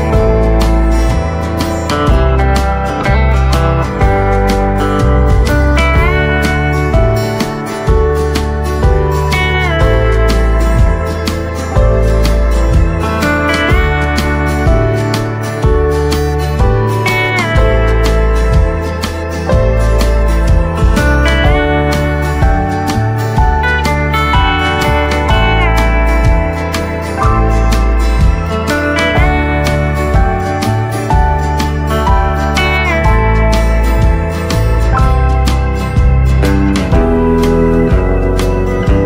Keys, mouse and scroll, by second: 0.5 scroll up 1, 1.2 click, 3.5 right click, 5.2 click, 8.7 shift+click, 9.2 right click, 10.3 scroll up 1, 12.0-13.3 typing, 15.7-22.2 drag, 23.9 right click, 25.8 click, 30.5 click, 31.8 scroll up 1, 32.3 click, 32.8 scroll up 1, 33.4 click, 33.9-34.3 scroll up 1, 34.3-39.0 drag.